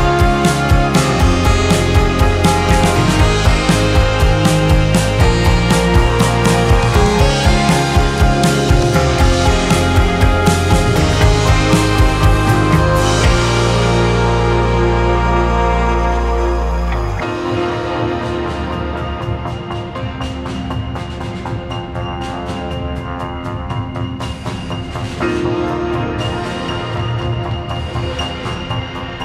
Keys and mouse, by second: 0.0-3.2 drag, 3.6-4.6 drag, 5.7-7.3 drag, 8.4-9.4 drag, 11.4-12.4 drag, 14.3-16.1 drag, 16.3-17.3 drag, 20.1-21.8 drag, 24.0-25.0 drag, 26.1-27.1 drag, 27.6-29.2 drag.